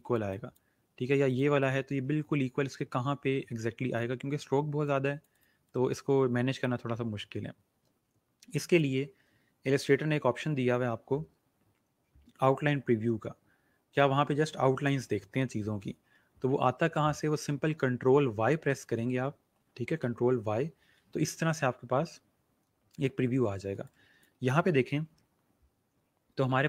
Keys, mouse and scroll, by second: 19.5 ctrl+y, 23.7 space, 23.8 click, 24.2 space.